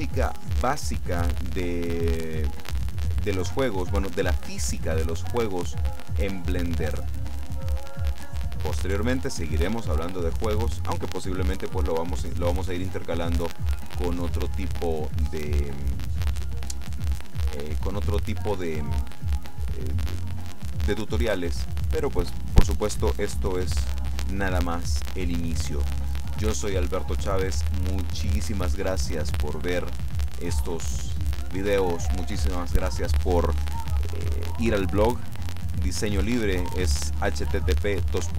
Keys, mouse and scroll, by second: 13.7-19.7 middle drag.